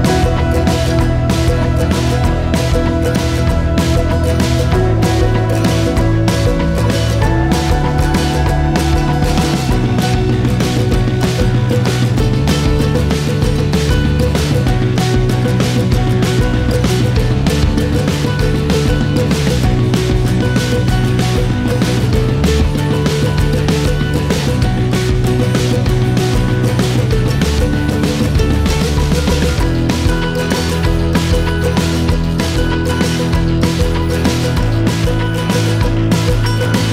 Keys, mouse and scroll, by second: 1.1 Tab, 2.1 a, 2.9 a, 4.7 u, 9.1 scroll up 3, 10.0 scroll up 3, 12.8 scroll up 1, 13.2 scroll down 1, 13.5-15.3 shift+middle drag, 17.7 a, 18.7 r, 26.4 shift+a, 28.9-29.5 scroll up 6, 29.8 click, 31.1-32.7 shift+drag.